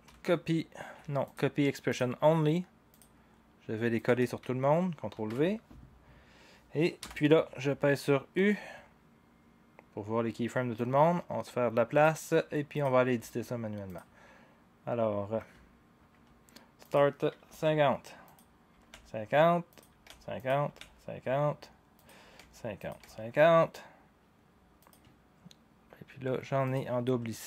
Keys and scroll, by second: 0.0 ctrl+c, 5.1 ctrl+v, 7.0 u, 17.2-23.5 typing.